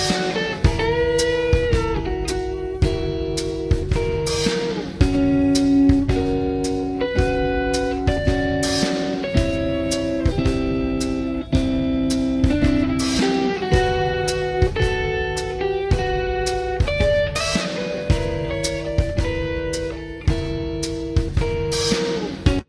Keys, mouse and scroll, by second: 0.2 click, 0.9 g, 4.6 click, 5.8 middle click, 9.2 click, 10.1 h, 13.1 ctrl+z, 14.3 g, 18.1 click, 19.0 g, 21.3 click, 22.0 g.